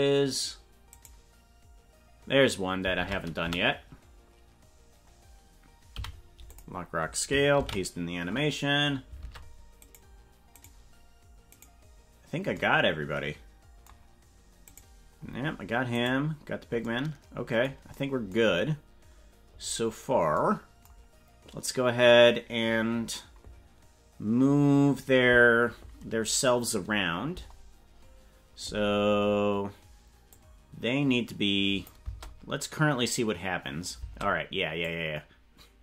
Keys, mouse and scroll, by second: 1.0 right click, 2.9 ctrl+Tab, 3.4 a, 6.0 i, 7.6 ctrl+v, 9.3 ctrl+Tab, 9.8 right click, 10.7 right click, 11.5 right click, 14.7 right click, 16.1 right click, 27.3 KP_0, 30.4-31.9 drag, 32.1 space, 34.2 space, 34.9-35.8 drag.